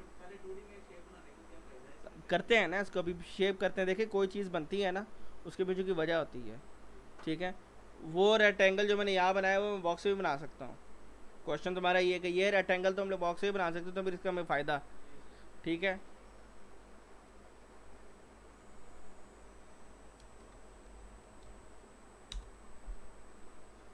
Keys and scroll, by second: 20.3 s, 21.8 typing, 22.3 Return.